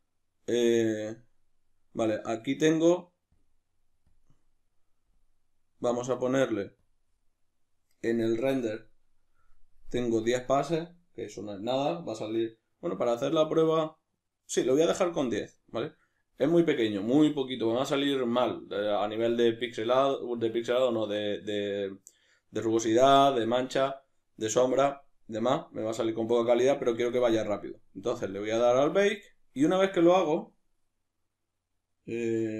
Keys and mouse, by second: 3.3-6.9 drag, 10.0-26.7 drag, 26.7-29.1 middle drag, 29.1-32.5 drag.